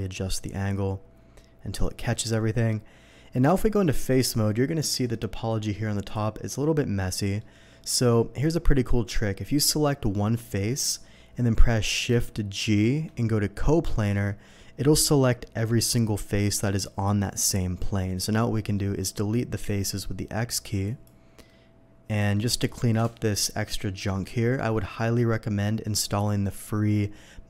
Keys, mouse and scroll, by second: 2.1-2.7 middle drag, 3.5 Tab, 3.8 middle click, 4.9 alt+a, 6.0 click, 6.7 middle click, 7.1 middle click, 7.9 alt+a, 10.4 click, 10.7 alt+a, 13.2 shift+g, 13.8 click, 18.5 middle click, 19.7 x, 20.8 click, 20.8 x, 21.4 middle click, 22.4 middle click, 23.1 middle click, 24.2 middle click.